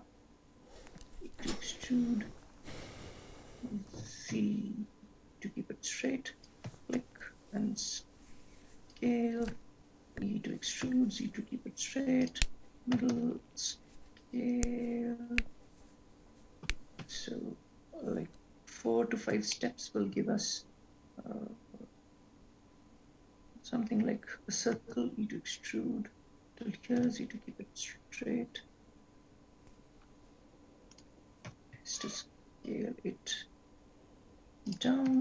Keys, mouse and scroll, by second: 1.1 e, 7.2 shift+s, 11.8 e, 13.4 shift+s, 19.3 scroll down 1, 20.1 shift+middle click, 22.6 scroll up 1, 25.1 e, 31.7 s.